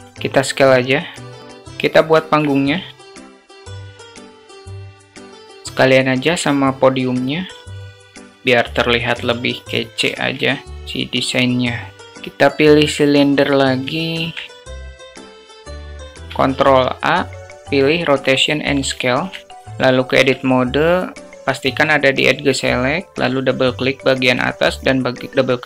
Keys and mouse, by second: 0.0 s, 1.4 click, 2.1 alt+shift+click, 2.7-5.0 typing, 3.6 alt+click, 3.7 Tab, 3.9 alt+click, 4.2 ctrl+b, 4.6 Tab, 7.0 click, 7.6 ctrl+click, 7.9 click, 8.7 alt+shift+middle click, 9.5 drag, 10.0 shift+a, 13.8-14.1 alt+shift+middle drag, 14.8 click, 15.5 click, 16.0 alt+shift+click, 16.3 ctrl+a, 18.8 shift+middle click, 19.0 alt+shift+click, 20.0 Tab, 23.4 click, 24.5 shift+click, 24.7 shift+click.